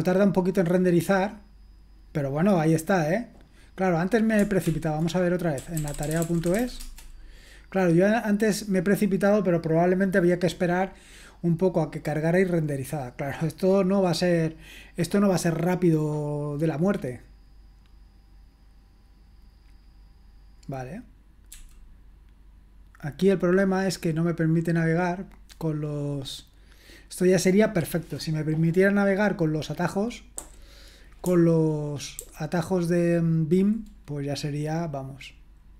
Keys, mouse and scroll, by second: 4.7 ctrl+l, 5.4-7.1 typing, 21.5 f, 25.1 click, 30.3 j, 32.2 ctrl+j.